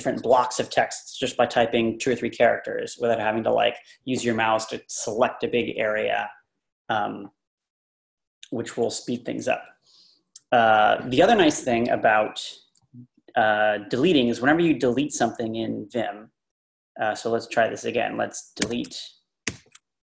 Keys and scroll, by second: 18.6 d, 19.5 shift+4.